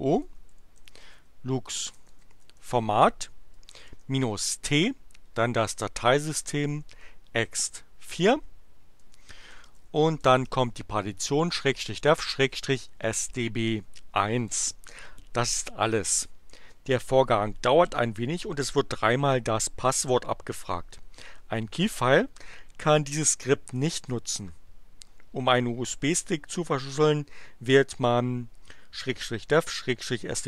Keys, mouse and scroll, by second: 0.0-4.5 typing, 5.9-7.1 typing, 9.0-11.1 typing, 12.2-13.7 typing.